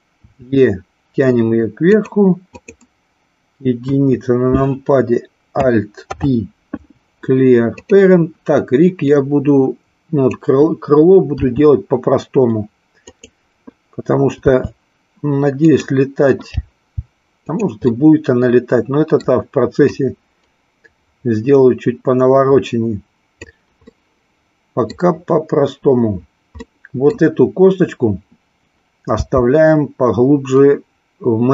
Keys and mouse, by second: 0.2 e, 2.0 click, 3.7 KP_1, 6.0 alt+p, 9.1-10.2 drag, 11.3 r, 13.1 click, 14.5 r, 15.7 click, 16.6 g, 17.8-19.2 middle drag, 20.0-23.3 drag, 23.8-25.0 middle drag, 26.6 middle click, 29.1 g.